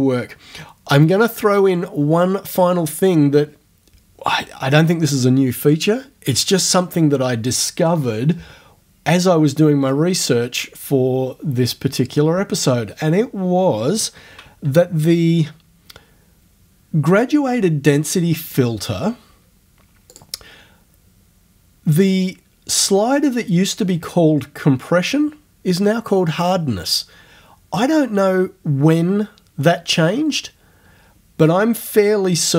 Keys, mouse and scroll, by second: 14.6 ctrl+f, 18.5 click, 20.2 click.